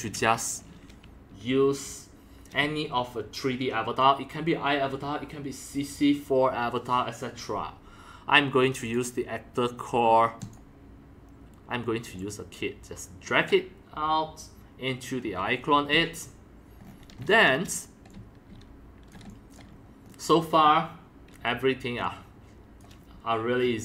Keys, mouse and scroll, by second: 0.5 click, 0.5-5.6 drag, 8.9-11.8 drag, 12.2-13.5 drag, 14.1-15.8 drag, 15.9 click, 16.0 click, 16.8-17.4 scroll up 11, 17.4 scroll down 1, 17.5 middle click, 17.9-19.7 typing, 18.1-19.1 drag, 19.7 scroll down 2, 20.1 scroll up 3, 20.2-20.5 scroll down 1, 22.0-23.4 drag, 23.4-23.8 middle drag.